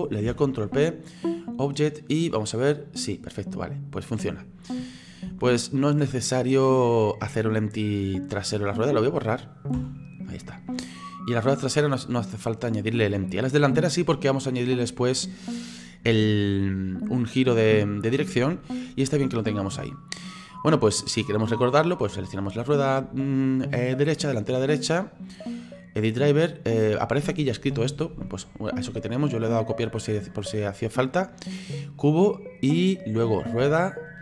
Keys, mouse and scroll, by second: 0.3 ctrl+p, 2.1 right click, 2.5-5.3 drag, 5.3 ctrl+z, 6.0-8.8 middle drag, 8.8 right click, 9.8 Delete, 10.9-13.0 middle drag, 13.0-14.0 scroll up 1, 14.0-19.8 middle drag, 19.8 scroll up 1, 19.9-20.9 middle drag, 20.9-22.0 scroll down 1, 22.0 right click, 25.1-34.2 right drag.